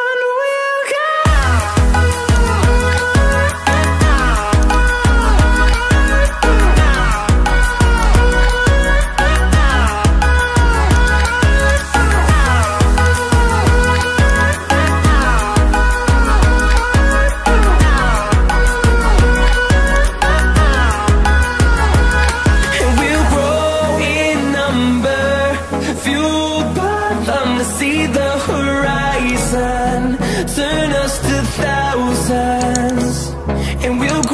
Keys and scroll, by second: 0.5 Return, 9.4 ctrl+t, 21.4 Return, 31.9 ctrl+t, 34.2 ctrl+z.